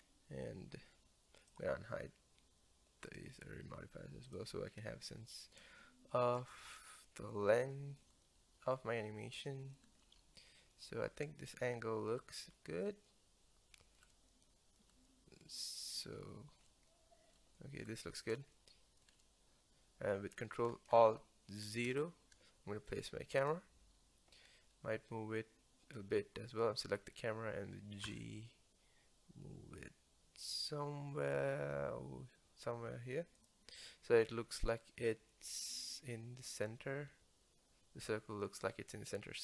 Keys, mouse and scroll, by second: 0.0-0.7 scroll up 1, 0.7 scroll down 1, 0.9-1.2 scroll up 1, 1.5 click, 3.1 click, 4.4 click, 4.8 scroll down 1, 5.2-21.7 middle drag, 21.7 alt+KP_0, 23.4 click, 28.1 g, 37.1 g.